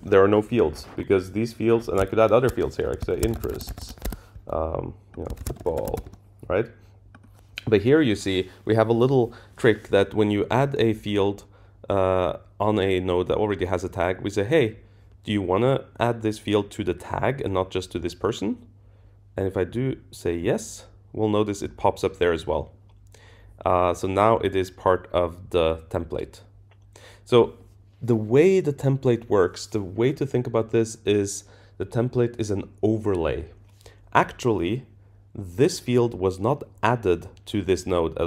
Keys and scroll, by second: 4.0 Escape.